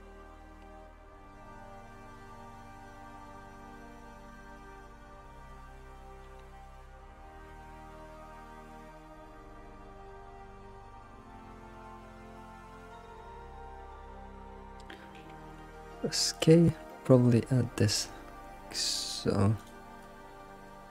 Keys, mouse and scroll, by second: 0.4-0.8 scroll down 5, 0.8-1.9 middle drag, 2.9 scroll down 4, 3.2 alt+middle click, 4.1 g, 5.5-6.2 scroll up 8, 6.2 alt+shift+z, 6.4-7.8 scroll down 6, 7.8-8.5 scroll up 7, 8.8 ctrl+z, 9.3 ctrl+z, 9.5 ctrl+z, 10.0-10.7 scroll down 3, 10.7 alt+shift+z, 11.1-11.6 scroll up 2, 11.6 alt+shift+z, 12.0 alt+shift+z, 12.4-13.5 shift+middle drag, 13.5 scroll up 2, 15.8 k, 20.8 scroll down 2.